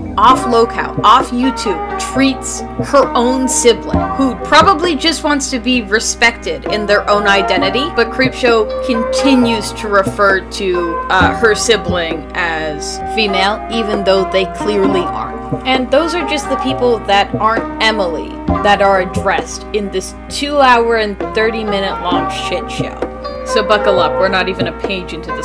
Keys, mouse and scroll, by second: 8.9 space, 18.4 space.